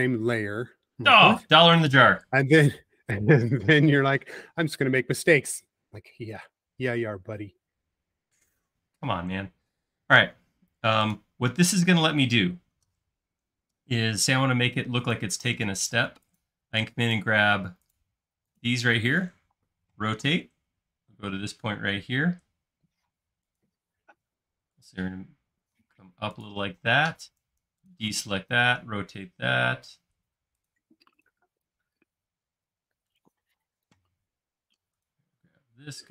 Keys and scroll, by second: 19.5 q, 26.9 space, 28.6 q, 33.6 space.